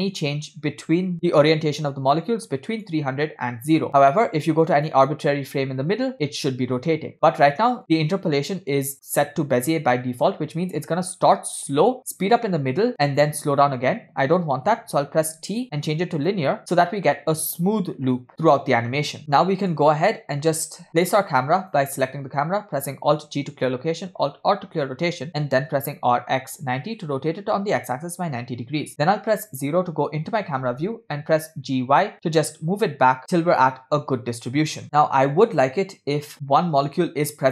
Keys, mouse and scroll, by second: 3.3 click, 5.4 click, 7.8 click, 11.7-12.1 drag, 12.9-14.2 drag, 15.3 t, 19.2 scroll down 4, 19.4 middle click, 21.7 click, 23.3 alt+g, 24.6 alt+r, 25.8 r, 28.2 KP_0, 30.3 g.